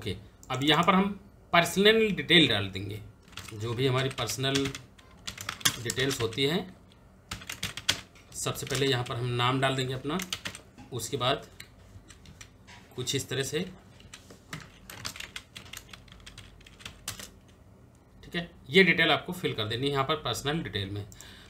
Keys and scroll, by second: 3.2 shift+p, 3.6 e, 5.1-7.3 typing, 8.3 shift+n, 9.6-10.7 typing, 14.2 Return, 14.7 Tab, 14.7-18.5 typing.